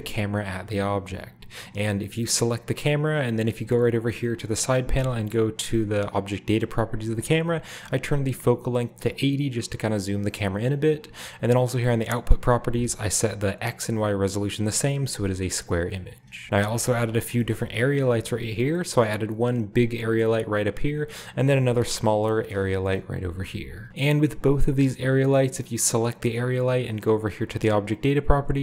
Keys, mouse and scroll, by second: 0.0-1.0 scroll down 1, 1.2 click, 2.1 scroll up 1, 3.4 click, 6.3 click, 8.3-9.4 drag, 9.4 middle click, 11.1 click, 11.5 click, 16.4 ctrl+space, 16.4-17.0 ctrl+scroll down 1, 16.6 a, 17.0-17.6 drag, 17.4-17.9 shift+middle drag, 18.0 ctrl+g, 18.5-19.9 drag, 19.1-19.9 scroll down 1, 19.9 scroll down 1, 21.0-22.2 right drag, 21.2-22.1 scroll up 1, 21.5 ctrl+space, 23.1 KP_0, 23.8 alt+Left, 24.5-25.6 right drag, 26.0 right click.